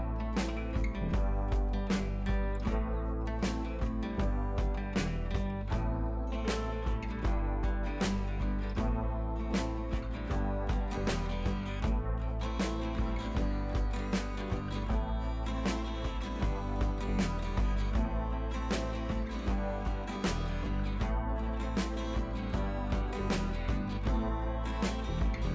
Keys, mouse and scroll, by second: 2.7 ctrl+z, 3.3 click, 7.5 scroll down 1, 7.6-8.5 typing, 8.1 scroll up 1, 10.5 click, 12.5 scroll down 1, 12.9 scroll up 1, 13.0-14.3 typing, 13.6 scroll down 1, 14.0 scroll up 1, 14.2 scroll down 1, 14.8-20.4 drag, 20.4 scroll down 1, 21.2 scroll up 1, 21.4 scroll down 1, 21.7-22.1 scroll up 1, 22.5-22.9 scroll down 1, 22.9-23.5 scroll up 1, 24.1 click, 25.0 scroll down 1, 25.4 scroll up 1.